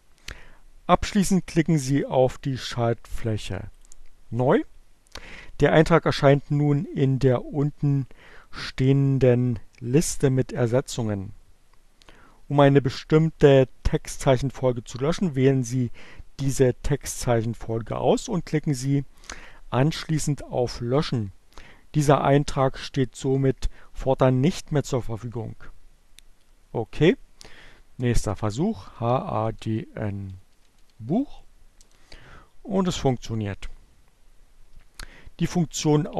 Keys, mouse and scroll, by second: 3.4 click, 26.5 click, 27.5 Return, 28.3-30.8 typing.